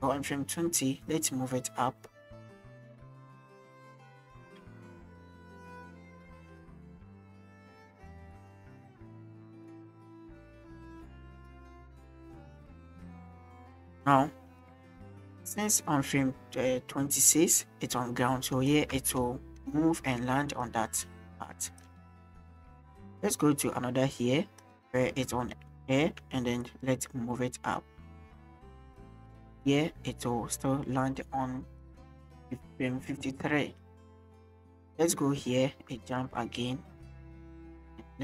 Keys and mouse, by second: 0.8 click, 4.0 KP_0, 4.4 KP_0, 5.7 KP_0, 7.1 shift+drag, 7.8 click, 11.8 click, 14.6-18.9 drag, 18.9 space, 20.5 click, 21.7 space, 21.8-24.6 drag, 25.4 shift+middle drag, 25.9 shift+middle click, 26.6 click, 29.3-31.8 drag, 33.3 click, 33.8-37.1 drag, 37.5 shift+drag.